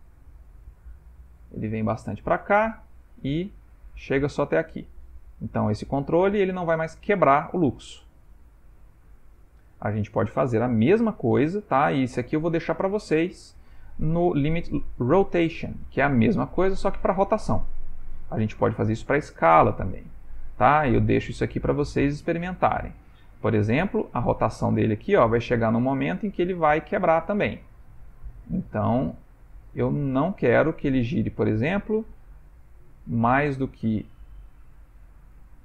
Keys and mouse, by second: 0.7 g, 12.3 click, 13.3-13.6 ctrl+middle click, 15.3 click, 15.8 click, 24.0 r.